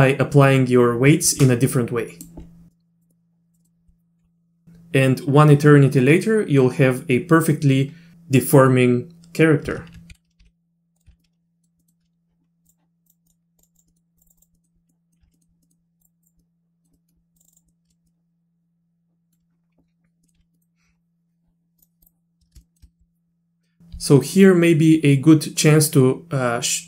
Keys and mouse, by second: 1.7 middle click, 2.7 middle click, 2.8 click, 3.1 click, 3.6 middle click, 10.4 g, 11.1 z, 11.2 middle click, 11.8 middle click, 12.7 click, 13.1 click, 13.6 click, 13.7 click, 13.9 middle click, 14.2 click, 14.4 click, 14.6 middle click, 14.9 middle click, 15.3 z, 15.3 middle click, 15.6 middle click, 16.0 click, 16.2 click, 16.4 middle click, 16.9 middle click, 17.4 click, 17.4 click, 17.5 click, 17.7 middle click, 18.1-19.3 middle drag, 20.2 middle click, 20.4 z, 20.5 middle click, 21.8 click, 22.0 click, 22.6 shift+middle click.